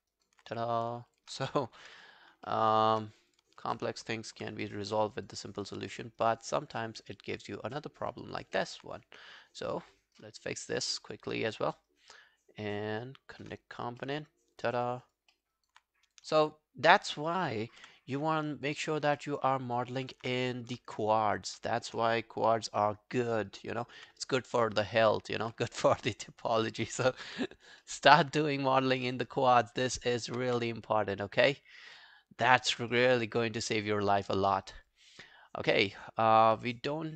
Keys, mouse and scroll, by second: 0.1 alt+right click, 1.1 shift+click, 1.8 g, 2.5 alt+middle click, 2.7 alt+right click, 3.7 shift+click, 4.4 g, 4.6 scroll down 1, 4.9 alt+middle click, 5.2 alt+right click, 5.4 alt+click, 5.7 alt+right click, 5.9 alt+middle click, 6.2 alt+right click, 6.4 alt+click, 6.8 alt+middle click, 7.0 alt+right click, 7.3 alt+click, 7.8 alt+middle click, 8.0 alt+right click, 8.2 alt+click, 8.6 alt+middle click, 9.0 right click, 11.5 shift+click, 11.9 shift+right click, 14.0 alt+middle click, 14.4 alt+scroll down 1, 14.6 alt+click, 15.0 alt+right click, 15.3 alt+middle click, 15.6 alt+right click, 17.0 shift+click, 18.2 scroll down 2, 18.4 alt+click, 18.9 alt+right click, 19.2 alt+middle click, 19.4 alt+right click, 19.7 alt+click, 20.0 alt+right click, 24.6 alt+click, 26.5 shift+click, 27.7 g, 27.8 alt+middle click, 28.2 alt+scroll down 1, 28.4 alt+click, 28.8 alt+middle click, 29.1 alt+right click, 29.3 alt+click, 29.6 alt+middle click, 29.9 alt+scroll down 1, 30.1 alt+click, 30.5 w, 30.8 right click, 31.7 scroll down 2, 32.0 alt+middle click, 32.5 alt+click, 32.9 alt+middle click, 33.1 alt+right click, 33.4 alt+click, 34.0 alt+click, 34.6 alt+right click, 34.9 alt+click, 36.6 alt+middle click, 36.9 alt+click.